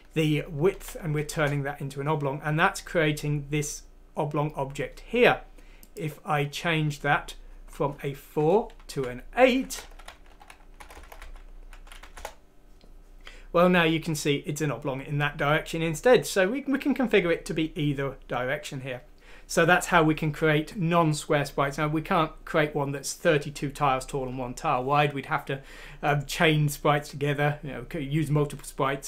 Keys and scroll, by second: 0.7 F6, 1.3 Return, 8.9 7, 10.1-11.2 typing, 12.0 F6, 12.2 Return.